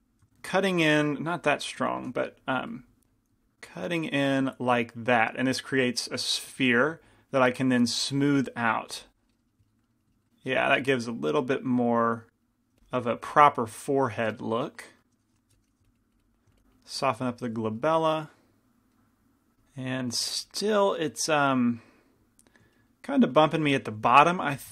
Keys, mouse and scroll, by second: 1.3 ctrl+z, 2.4 shift+f, 3.2-6.8 drag, 4.5-6.8 middle drag, 6.8 f, 7.4-9.9 drag, 9.4-12.3 middle drag, 11.1-12.7 drag, 12.5 middle click, 12.9 f, 13.8-15.1 drag, 13.8-15.0 right drag, 15.6 i, 15.8-19.6 drag, 15.9 f, 17.6-18.9 right drag, 24.5 g, 24.5 f.